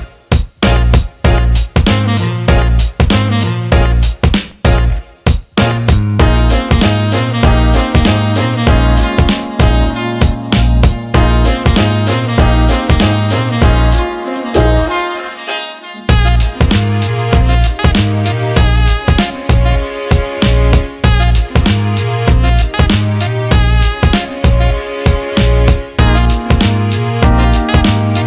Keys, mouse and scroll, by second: 0.4 alt+middle click, 1.5 alt+middle click, 2.5 alt+middle click, 2.9 alt+shift+middle click, 3.2-4.2 alt+middle drag, 6.9 alt+middle click, 9.4 alt+shift+middle click, 10.7 Tab, 13.3 click, 16.4 alt+middle click, 19.3-20.7 drag, 23.3 alt+middle click, 23.9 Tab, 24.9-28.2 right drag.